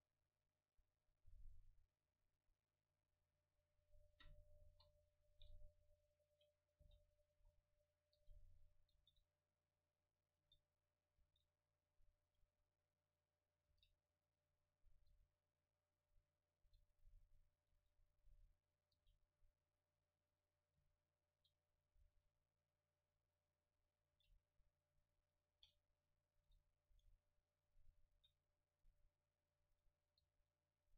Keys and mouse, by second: 4.1-7.3 middle drag, 4.7 KP_1, 6.9 g, 7.4-8.6 drag, 7.4 s, 8.2 g, 9.0 shift+d, 10.5 s, 10.8-12.1 drag, 11.3 shift+d, 12.5 middle click, 13.7 g, 15.1 g, 16.0 click, 16.6 g, 17.8 shift+d, 18.0 click, 19.0 g, 20.8 g, 21.0 click, 21.6 middle click, 22.0 shift+d, 23.4-25.6 drag, 23.6-25.6 middle drag, 24.2 g, 25.6 shift+d, 26.5 s, 28.2 shift+d, 30.3 g.